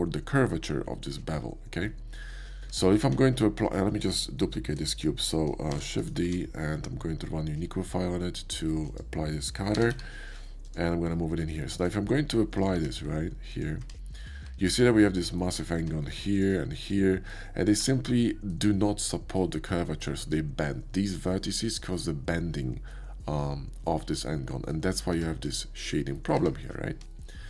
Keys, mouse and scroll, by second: 0.8 middle click, 2.6 Tab, 3.0 q, 5.7 shift+d, 6.0 click, 6.2 q, 8.9 click, 9.8 g, 10.0 y, 10.6 click, 11.3 middle click, 12.1-13.5 shift+middle drag, 12.7 q, 13.5 click, 13.6 middle drag, 14.1 shift+middle click, 14.4 Tab, 15.8 Tab, 16.2 click, 16.8 click, 18.1-20.3 drag, 21.0 click, 21.6-24.7 drag, 25.1 Tab, 25.4 click, 26.1 click, 26.4-27.1 middle drag, 27.1 scroll up 1.